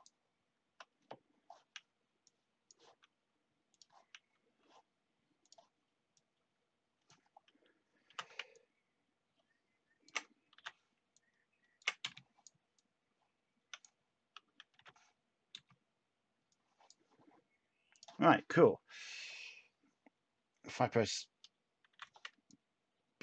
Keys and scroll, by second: 8.0 t, 10.5 h, 12.0 space, 14.7 h, 21.9 b.